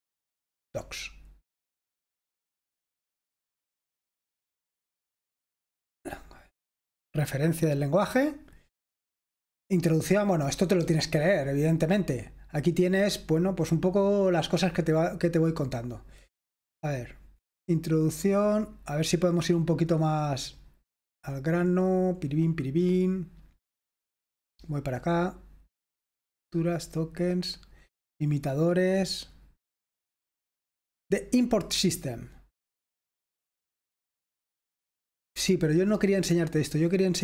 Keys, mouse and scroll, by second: 6.7 click, 18.8-23.3 drag, 24.1-25.5 drag.